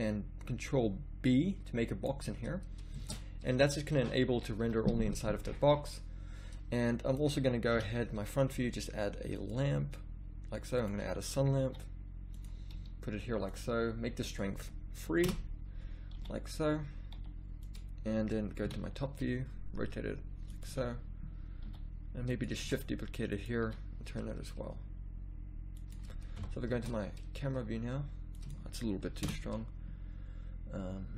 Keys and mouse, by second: 3.1 shift+z, 4.6 z, 4.8 z, 7.7 KP_1, 11.6 g, 12.7 r, 16.3 g, 17.1 g, 18.6 KP_7, 19.8 r, 20.6 g, 21.7 g, 22.7 shift+d, 23.7 r, 26.4 KP_0, 26.8 shift+z, 28.4-29.9 drag.